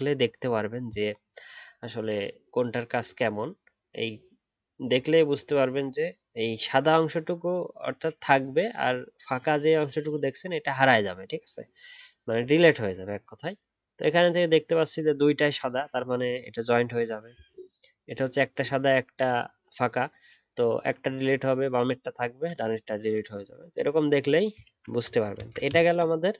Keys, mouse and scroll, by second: 24.6 alt+scroll down 3.